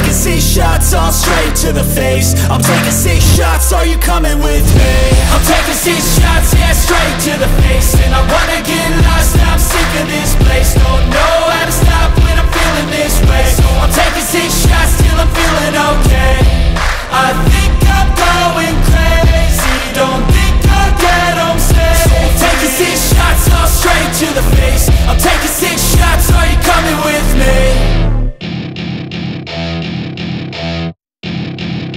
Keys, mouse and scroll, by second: 1.5 r, 2.7 Tab, 3.0 a, 3.1 a, 3.7 scroll up 1, 3.9 1, 4.1 click, 5.3 shift+d, 5.7 click, 6.3 scroll up 12, 6.6 shift+middle click, 7.1 g, 8.1-9.2 scroll down 18, 8.6 Tab, 8.7 click, 9.4 KP_Decimal, 9.7 scroll down 2, 9.7 middle click, 10.2-13.5 drag, 13.5-15.9 middle drag, 15.9-17.5 drag, 17.5 ctrl+a, 18.2 middle click, 18.5 click, 18.6 middle click, 19.3 click, 20.3-21.3 drag, 21.3 middle click, 21.4 scroll up 1, 21.7 scroll down 1, 21.8 shift+middle click, 22.3 Tab, 22.4 click, 22.5 Tab, 22.7 scroll down 1, 23.2 KP_1, 23.7 KP_7, 24.0 scroll up 3, 24.2 s, 26.3-26.6 scroll up 10, 26.6 shift+middle click, 26.7 scroll down 1, 26.9 click, 27.0 scroll up 1, 27.2 s, 28.6-30.4 drag, 30.6 click.